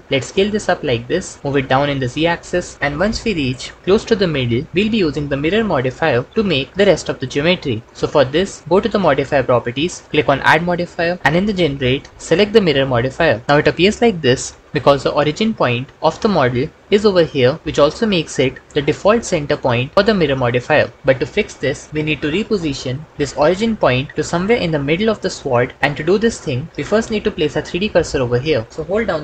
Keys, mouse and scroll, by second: 0.1 s, 1.4 g, 1.4 z, 8.6 Tab, 10.8-13.1 drag.